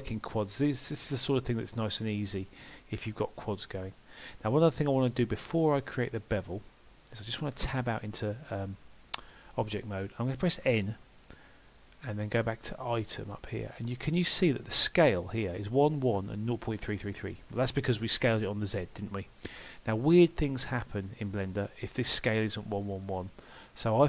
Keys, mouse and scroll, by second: 5.2 middle click, 7.7 Tab, 12.9 click.